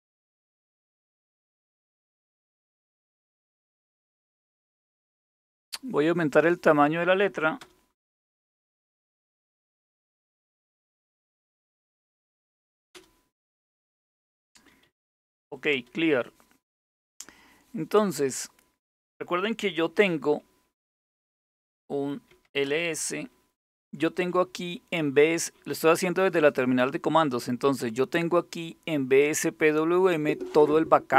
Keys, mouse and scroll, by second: 1.2-5.6 typing, 7.0-10.3 typing, 10.5 Return, 11.1 Down, 11.3 Down, 11.5 Down, 11.7 Down, 11.8 Down, 12.2-13.1 typing, 14.3-15.9 typing, 20.5 typing, 21.7-22.6 typing.